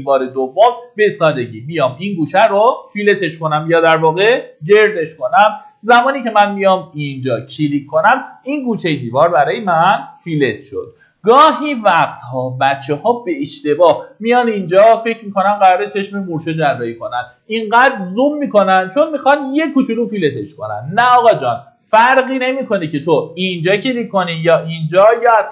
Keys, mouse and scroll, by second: 5.6-6.5 scroll up 1, 7.1 click, 10.1-10.5 scroll down 1, 11.4 middle click, 12.3-13.0 scroll up 1, 20.9-23.9 scroll down 1.